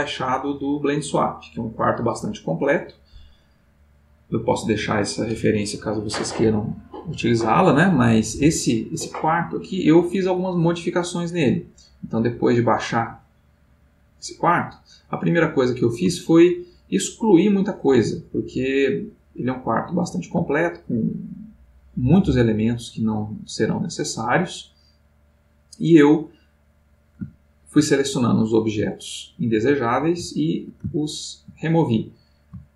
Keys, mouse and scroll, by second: 10.9 click, 12.8 click, 16.3-19.9 ctrl+middle drag, 22.0-27.9 middle drag, 28.6-32.7 middle drag.